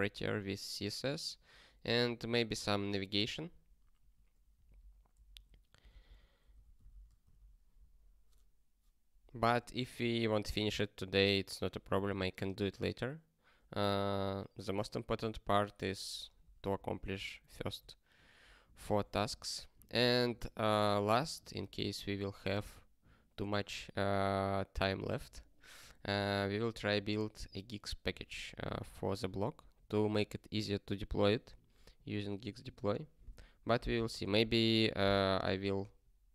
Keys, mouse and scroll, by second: 1.4 ctrl+n, 1.8 ctrl+space, 2.0 ctrl+e, 4.0 ctrl+g, 4.7 alt+b, 5.1 alt+d, 5.3 alt+d, 5.5-7.4 typing, 9.4 ctrl+a, 9.7 ctrl+space, 9.9 ctrl+n, 11.2 ctrl+g, 11.8 ctrl+space, 12.0 ctrl+p, 16.1 ctrl+space, 16.2 ctrl+p, 16.4 ctrl+p, 17.5 ctrl+g, 17.7 ctrl+n, 18.3 ctrl+n, 19.8 ctrl+space, 20.0 ctrl+n, 21.4 ctrl+g.